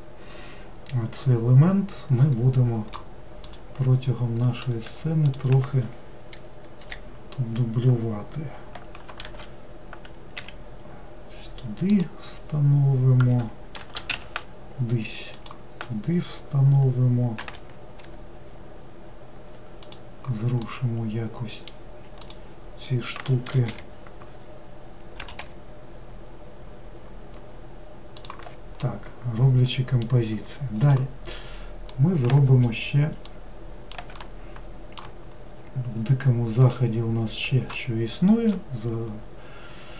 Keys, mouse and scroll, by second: 3.5 click, 4.9 3, 5.3 click, 6.8 l, 9.3 shift+d, 13.8 shift+d, 17.4 g, 20.7-22.3 middle drag, 22.3 click, 23.7 l, 25.2 g, 28.8-31.8 middle drag, 31.8 scroll down 1, 32.0-35.6 middle drag, 35.6-36.6 scroll down 1, 36.6-37.8 scroll up 1, 37.8-39.9 shift+middle drag.